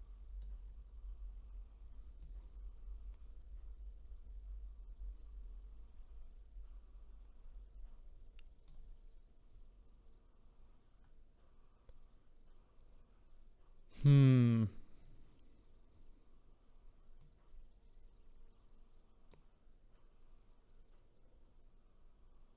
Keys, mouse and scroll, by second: 2.2-5.2 drag, 17.2-20.3 drag.